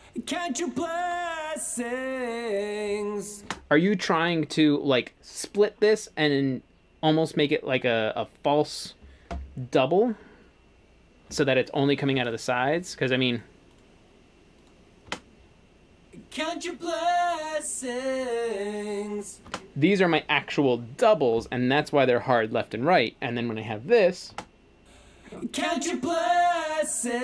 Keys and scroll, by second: 3.5 space, 15.1 space, 19.5 space, 24.3 space.